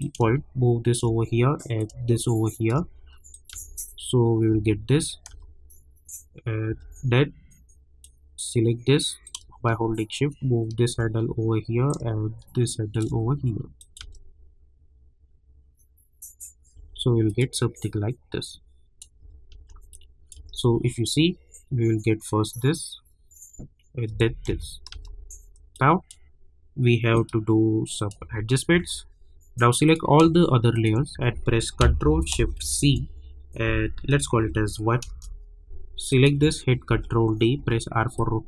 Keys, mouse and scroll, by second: 1.8-3.3 drag, 3.5 space, 8.0-11.9 drag, 11.9-13.8 drag, 14.0 space, 16.7 space, 17.4 click, 19.2 space, 19.9 click, 20.3 space, 24.1 space, 25.7-27.1 drag, 28.2 space, 29.8 click, 30.7 shift+click, 32.6 ctrl+shift+c, 34.3 1, 35.1 Return, 36.1 click, 36.8 ctrl+d, 37.5 r, 38.1-38.4 drag.